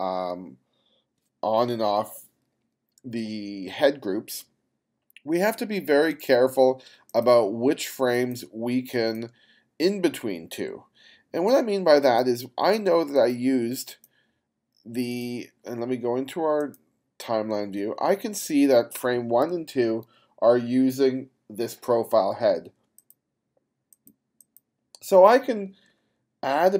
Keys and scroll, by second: 19.6 f.